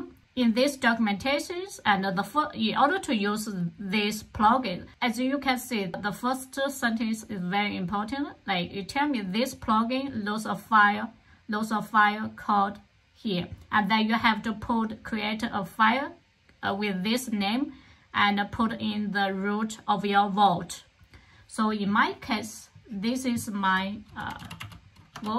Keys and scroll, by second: 23.7-25.0 typing, 25.0 Return.